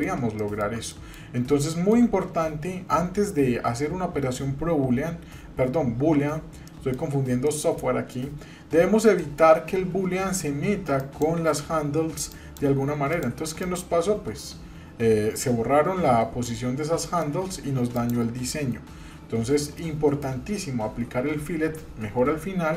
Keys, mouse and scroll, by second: 0.4 shift+middle click, 0.9 middle click, 1.7 shift+middle click, 2.3-3.3 scroll down 1, 6.7 middle click, 7.4 middle click, 8.4-8.9 scroll up 1, 9.2 shift+middle click, 9.7-10.8 scroll up 1, 11.0 click, 12.3 click, 13.1 click, 13.6 click, 16.7-17.0 scroll down 1, 17.0 middle click, 17.9 click, 19.3-19.8 scroll down 2, 19.8 middle click.